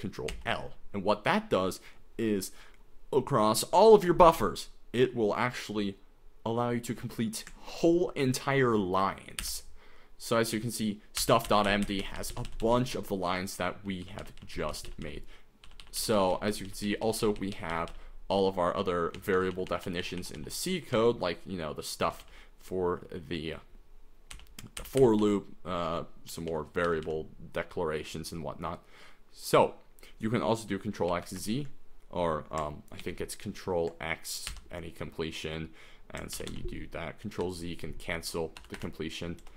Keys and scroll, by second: 0.5 ctrl+l, 9.4 ctrl+n, 11.2 ctrl+n, 11.5 ctrl+n, 11.8 ctrl+n, 12.0 ctrl+n, 12.2 ctrl+n, 12.5-13.8 ctrl+n, 14.0 ctrl+n, 14.2 ctrl+n, 14.4 ctrl+n, 14.5 ctrl+n, 14.7 ctrl+n, 14.9 ctrl+n, 15.0 ctrl+n, 15.6 ctrl+n, 15.8 ctrl+n, 16.0 ctrl+n, 16.1 ctrl+n, 16.3 ctrl+n, 16.5 ctrl+n, 16.6 ctrl+n, 16.8 ctrl+n, 17.0 ctrl+n, 17.2 ctrl+n, 17.4 ctrl+n, 17.5 ctrl+n, 17.7 ctrl+n, 17.9 ctrl+n, 19.2 ctrl+p, 19.3 ctrl+p, 19.5 ctrl+p, 19.7 ctrl+p, 19.8 ctrl+p, 20.0 ctrl+p, 20.4 ctrl+p, 20.9 ctrl+p, 21.9 ctrl+p, 22.0 ctrl+n, 22.2 ctrl+n, 24.4 ctrl+n, 24.8 ctrl+n, 25.0 ctrl+n, 25.2 ctrl+n, 26.3 ctrl+p, 26.5 ctrl+p, 26.9 ctrl+n, 27.0 ctrl+n, 31.1 ctrl+x, 31.2 ctrl+z, 33.0 ctrl+x, 34.5 ctrl+n, 36.4 ctrl+n, 36.5 ctrl+n, 37.5 ctrl+z, 38.6 BackSpace, 38.8 BackSpace, 39.4 BackSpace.